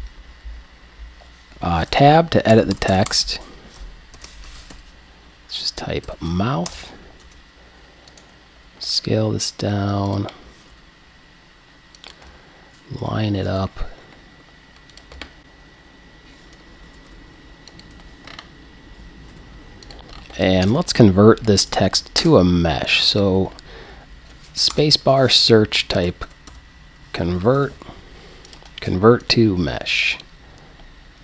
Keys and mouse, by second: 1.9 Tab, 2.5 BackSpace, 4.2-6.1 typing, 6.7 Return, 7.2 Tab, 8.1 middle click, 8.6 s, 10.7 g, 13.4 g, 16.9 g, 17.9 click, 18.0 KP_1, 18.1 click, 19.3 g, 20.0 click, 20.2-20.5 drag, 21.6 click, 22.2 space.